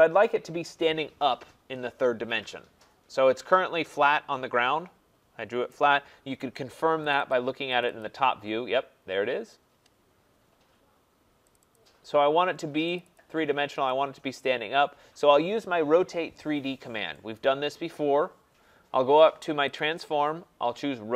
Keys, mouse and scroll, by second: 5.7 right click, 7.1 click, 7.3 click, 7.8 click, 8.0 click, 8.6 middle click, 8.6 middle click, 8.7 middle click, 11.5 click, 11.7 click, 13.0 click, 13.1 click, 13.5 middle click, 13.6 middle click, 14.3 right click, 14.7 middle click, 14.8 middle click, 14.9 middle click, 17.3 click, 19.8 click.